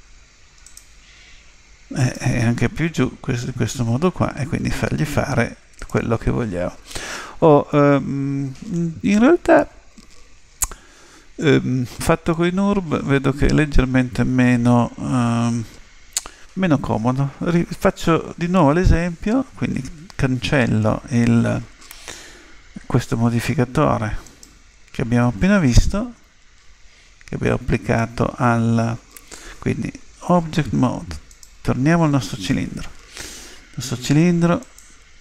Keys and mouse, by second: 2.0 right click, 3.1 g, 24.2 right click, 30.2 Tab, 31.3 right click, 34.6 click.